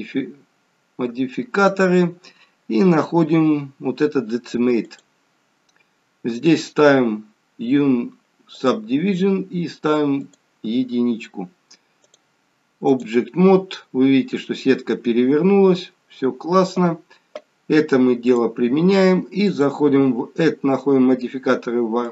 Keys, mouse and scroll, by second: 1.7 click, 8.6 click, 10.2 click, 12.0 click, 14.2-15.2 scroll up 4, 18.2 click, 19.5 click.